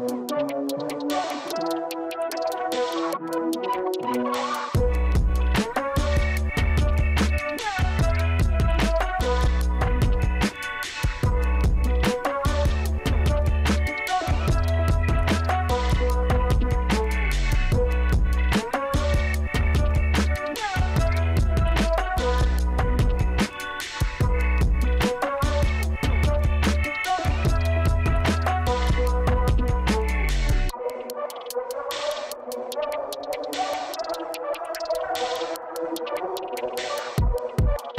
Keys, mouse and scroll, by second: 0.1 Escape, 0.4 scroll up 1, 1.1-2.5 scroll up 3, 2.5-3.5 scroll down 3, 4.1 click, 7.8 click, 9.4 middle click, 11.3 middle click, 11.9 middle click, 12.1 middle click, 12.9 click, 14.0-15.1 middle drag, 16.8 click, 19.6 click, 20.8 click, 22.1 click, 31.0 click, 34.6 click.